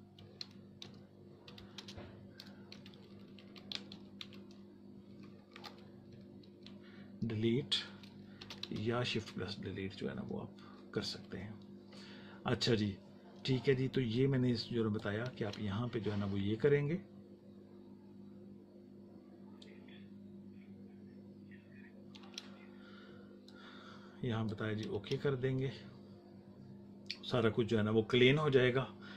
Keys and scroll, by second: 0.0-1.7 typing, 2.6 Left, 3.6 Right, 4.1 Left, 8.3 r, 8.6 space, 9.6 Right, 11.4 Left, 15.2 space, 22.1 space, 24.9 space.